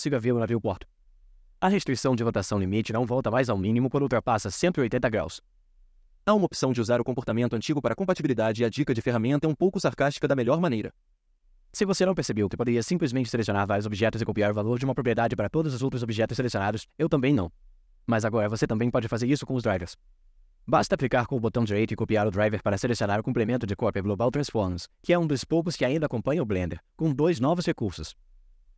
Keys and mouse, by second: 12.8 shift+click, 14.5-15.2 drag, 15.2 right click, 18.4-20.6 right drag, 21.8 click.